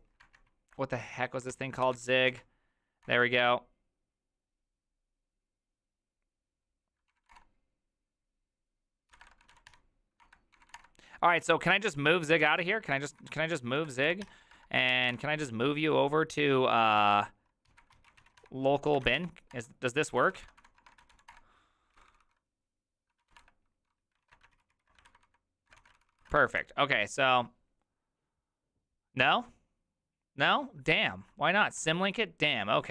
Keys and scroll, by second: 0.2 alt++, 1.5-2.4 typing, 3.0 Return, 7.0-7.7 typing, 8.8-11.0 typing, 10.2 Return, 12.1-15.0 typing, 17.0-21.6 typing, 22.0 ctrl+c, 22.9-24.3 typing, 24.2 ctrl+a, 24.5 ctrl+u, 24.7 ctrl+u, 25.1 ctrl+d, 25.8 shift+a, 26.0 ctrl+c, 26.1 ctrl+c, 26.2 ctrl+c, 31.8 alt+{, 32.7-32.9 typing.